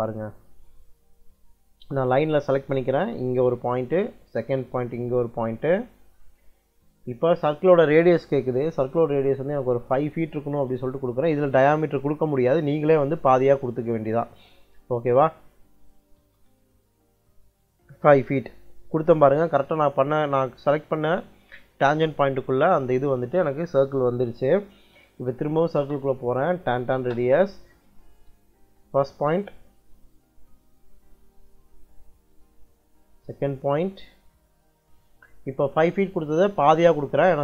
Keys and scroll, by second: 10.6 5, 12.5 ', 16.1 Return, 25.2 c, 25.7 space, 26.5 t, 26.9 space.